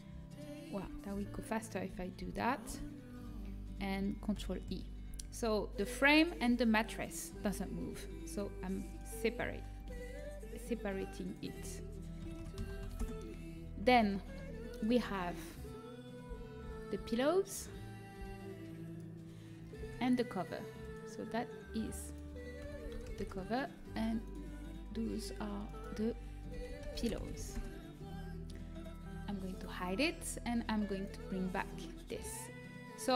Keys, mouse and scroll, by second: 0.8-2.6 typing, 2.9-7.4 middle drag, 4.3 ctrl+i, 7.9 p, 8.8-13.0 right drag, 9.7 Tab, 11.2 click, 14.1-14.4 scroll up 1, 14.9 Tab, 16.2 l, 16.6 l, 16.9 l, 18.1 p, 19.7 Tab, 26.9 l, 29.3-32.6 drag, 32.6-33.1 middle drag.